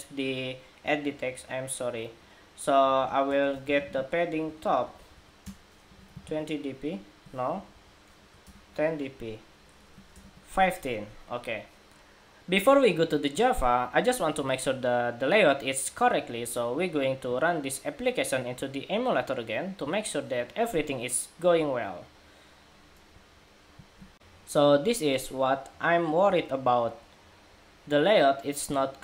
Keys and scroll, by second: 23.9 shift+super+2.